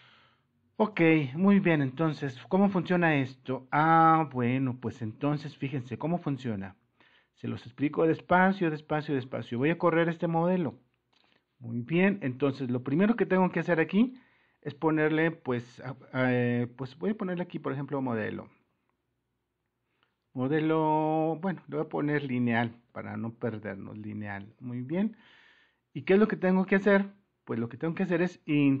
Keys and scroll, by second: 15.1 Caps_Lock, 16.8-19.1 typing, 21.2-26.4 typing, 27.6 alt+Tab.